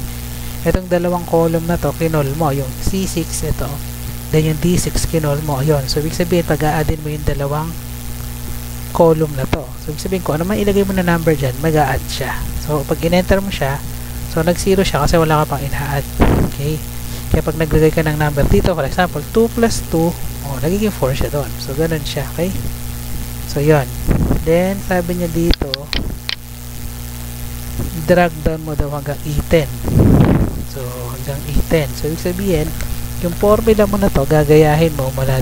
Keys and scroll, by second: 13.2 Return, 13.8 Up, 14.8 Left, 15.3 Right, 15.4 Left, 15.5 Right, 16.9 Left, 18.4 2, 19.1 Right, 19.6 2, 19.9 Right, 20.9 Down, 21.0 Up, 21.4 Left, 22.0 Delete, 22.3 Left, 22.6 Delete, 22.9 Right, 31.7 Tab.